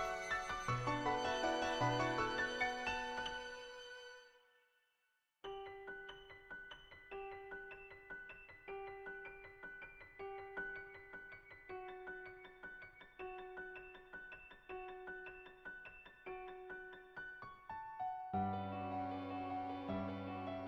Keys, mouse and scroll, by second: 1.8-4.8 drag, 3.3 KP_0, 7.5 click, 12.6 click, 13.6-19.6 drag.